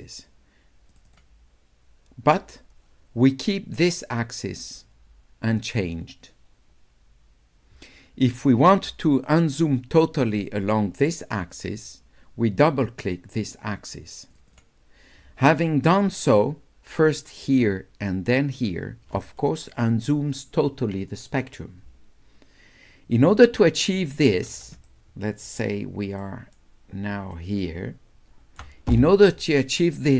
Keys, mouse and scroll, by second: 0.9 click, 1.1 click, 14.3-15.8 drag, 24.9 shift+right click, 26.2 shift+right click, 27.3 shift+right click, 28.3 shift+click.